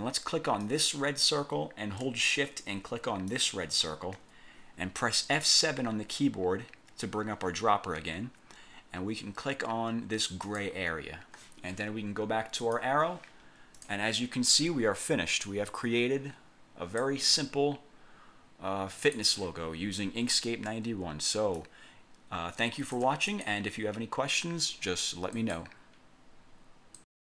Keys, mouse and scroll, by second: 0.7 click, 3.4 shift+click, 6.1 F7, 10.5 click, 12.7 click, 13.9 click, 15.6-17.3 drag, 19.1 click, 21.7-23.3 ctrl+shift+drag, 23.5 ctrl+shift+click, 25.5 click, 27.1 click.